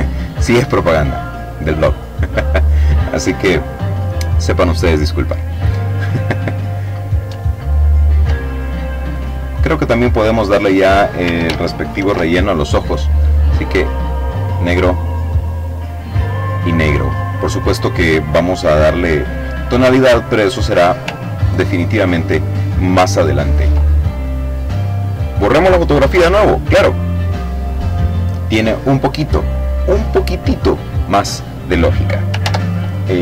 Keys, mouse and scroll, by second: 6.1-6.6 ctrl+scroll up 1, 6.6 ctrl+scroll down 1, 6.7-8.0 ctrl+drag, 8.8 click, 10.3 ctrl+shift+f, 12.1 click, 13.4 click, 14.5 click, 15.7-18.4 drag, 18.6 click, 19.5-20.1 ctrl+scroll down 2, 20.3-20.7 ctrl+scroll down 2, 20.8-22.5 ctrl+drag, 22.6 click, 23.4 click, 24.4 Delete, 30.7 ctrl+z, 32.0 click, 33.0 ctrl+shift+f.